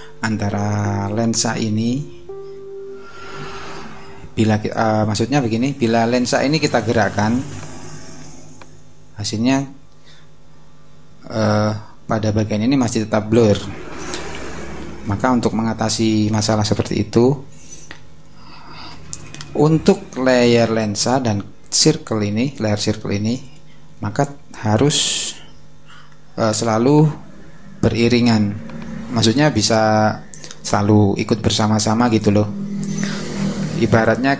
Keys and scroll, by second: 14.3 super+z.